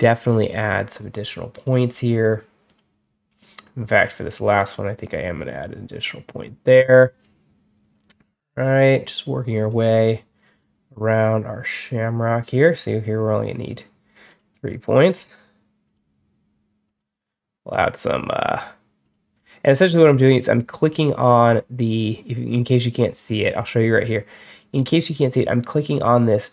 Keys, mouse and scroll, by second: 1.4 click, 2.5 click, 4.0 click, 5.1 click, 6.7 click, 9.5 click, 10.3 click, 12.4 click, 14.1 click, 14.9 click, 15.7 click, 16.7 click, 17.9 click, 18.9 click, 19.2-19.7 scroll down 2, 19.7 middle click, 20.0 scroll up 1, 20.6 middle click, 20.7 scroll up 1, 20.8 middle click, 21.1 scroll down 2, 21.4 middle click, 23.4 click, 24.4 click.